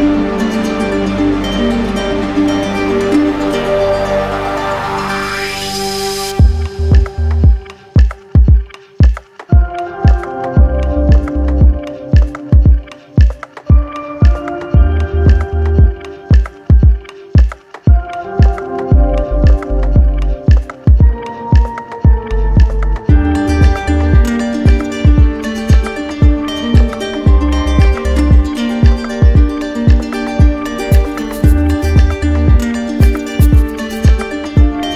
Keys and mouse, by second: 0.4-7.3 right drag, 7.3 alt+click, 8.3 click, 9.9 click, 11.4 click, 12.8-13.9 right drag, 15.2-16.8 right drag, 17.4 alt+right click, 19.4 right click, 20.3 click, 22.2-24.3 drag, 24.3-25.4 right drag, 26.5-27.6 drag, 30.0-31.1 drag, 32.7 click, 34.2 right click.